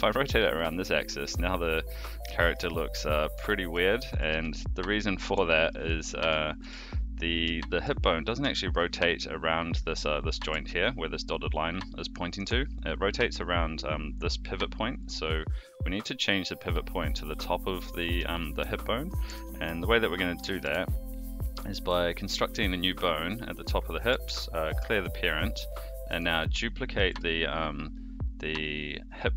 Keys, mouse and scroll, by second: 2.3 shift+middle drag, 2.6-3.0 middle drag, 3.4 shift+middle drag, 4.1 r, 5.5 middle click, 6.6 alt+r, 7.6 shift+middle drag, 8.5 shift+middle drag, 10.4 r, 13.2 click, 14.9 click, 18.3 shift+middle click, 19.2 Tab, 19.6 click, 20.3 e, 22.2 click, 24.2 alt+p, 26.1 click, 26.9 shift+d.